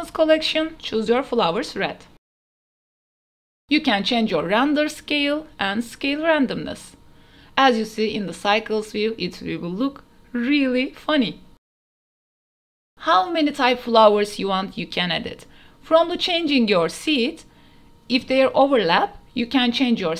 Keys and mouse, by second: 2.1-4.4 drag, 4.8 click, 6.8 ctrl+s, 7.0 a, 7.1 a, 10.0 ctrl+s, 14.9 click, 16.3 click, 17.6 click, 18.7 click.